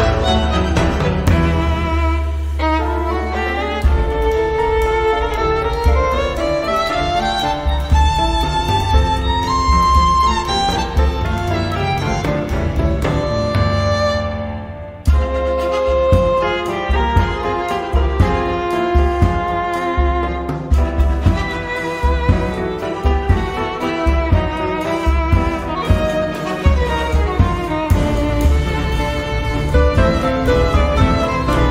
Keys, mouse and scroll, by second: 1.3 scroll down 1, 2.7 click, 6.0-7.1 drag, 9.3 click, 10.5 4, 11.7 click, 12.7 click, 13.5 scroll up 2, 14.0 scroll down 1, 14.6 scroll up 1, 15.2 click, 17.2 click, 22.5-22.8 scroll down 1, 22.9 scroll up 1, 23.1-24.3 middle drag, 25.3 click, 28.5 click, 30.0 click, 31.4 click.